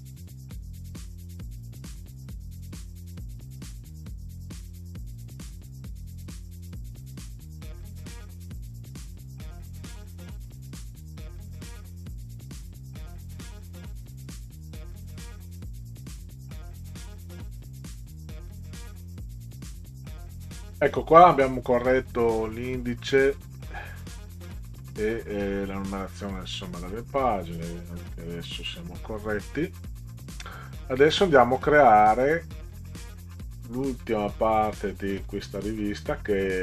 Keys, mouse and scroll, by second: 0.7 click, 1.4 Right, 1.6 Return, 1.9 click, 4.5 1, 5.0 click, 5.2 Tab, 5.6 click, 5.8 1, 6.3 click, 6.6 Tab, 7.2 Tab, 8.6 Tab, 8.8 3, 9.2 click, 10.7 click, 11.0 click, 14.6 scroll down 2, 23.4 scroll down 2, 24.8 click, 26.6-28.0 scroll down 8, 29.7 scroll up 4, 31.0 click, 32.2 click, 33.3-33.9 scroll down 4.